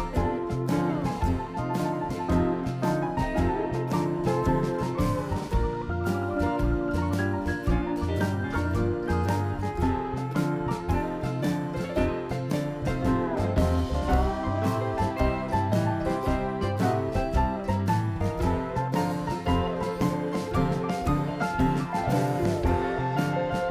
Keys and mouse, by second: 0.0 e, 0.8-3.3 drag, 3.9 x, 8.0 KP_7, 13.5 click, 14.3 Tab, 17.0 Tab, 18.1 click, 19.0 click, 20.2 z, 20.8 ctrl+x, 20.8 ctrl+z, 22.5-23.7 drag.